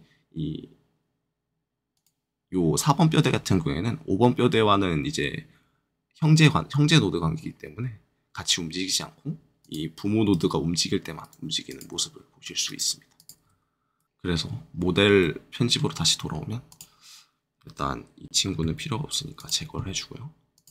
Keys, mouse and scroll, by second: 1.9-5.9 drag, 9.6 click, 10.2 r, 11.2 right click, 11.6 click, 11.9 r, 12.6 right click, 13.1 click, 13.4 r, 13.9 right click, 14.0-15.2 scroll down 2, 15.2 middle click, 16.6 click, 18.5 Delete, 19.3 click, 20.5 click.